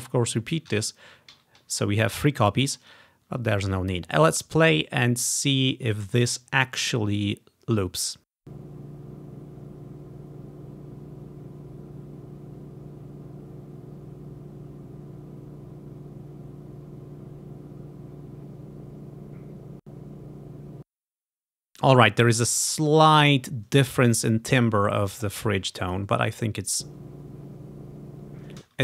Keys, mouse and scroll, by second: 0.8 Right, 1.4 ctrl+v, 3.0 click, 8.5 click, 8.6-10.0 drag, 12.1-12.4 ctrl+scroll up 1, 14.0-15.5 scroll up 1, 20.9 space, 21.4-22.3 ctrl+scroll down 3, 22.3 scroll up 1, 24.2-25.4 scroll down 2, 26.8-28.4 drag, 28.7 space.